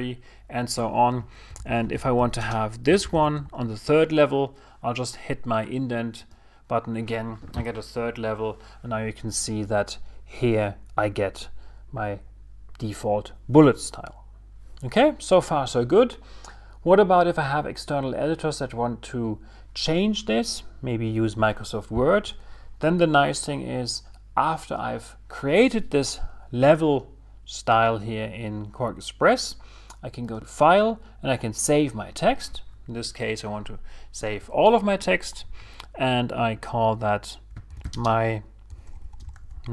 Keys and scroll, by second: 3.5 shift+t.